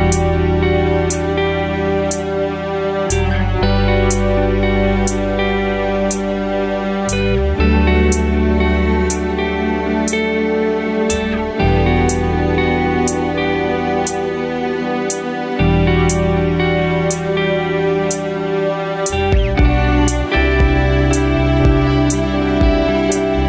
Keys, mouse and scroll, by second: 3.1 g, 4.6 click, 5.4 KP_7, 6.9 g, 11.3 click, 11.5 middle click, 12.9-18.4 drag, 19.6-20.2 scroll down 1, 20.2-20.6 middle drag, 20.2-20.6 scroll down 1, 21.9 KP_7, 23.1 shift+d.